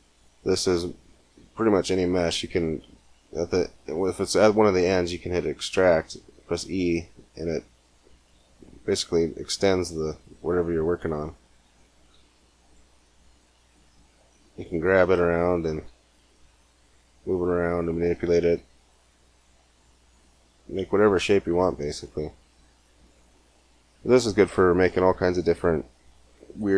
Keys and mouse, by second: 0.2-3.4 middle drag, 5.3 e, 9.0 e, 11.0 click, 11.8 r, 13.2 g, 15.6 r, 18.0-19.0 middle drag, 18.9 e, 21.0 g.